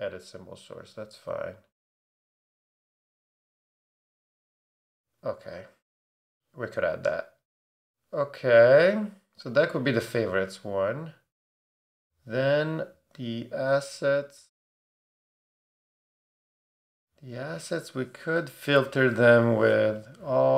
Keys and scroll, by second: 18.7 Return.